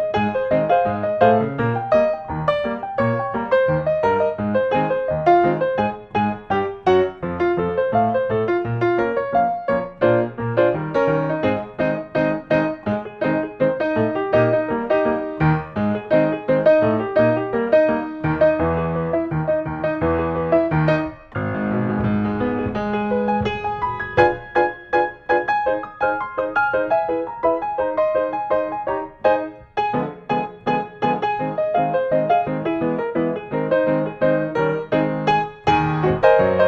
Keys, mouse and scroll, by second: 2.2 click, 3.8 click, 9.6-10.4 scroll, 10.4 click, 11.4 right click, 12.6 click, 13.5 n, 14.7 middle click, 16.2 middle click, 18.3 click, 19.1 click, 21.4 click, 23.1 click, 25.1 click, 25.7-26.1 scroll, 26.9-27.9 typing, 29.0 click, 29.8 click, 30.4 click, 31.1-32.0 typing, 32.2 Return, 33.2 Escape, 34.5 click, 36.1 click, 36.5-36.6 scroll.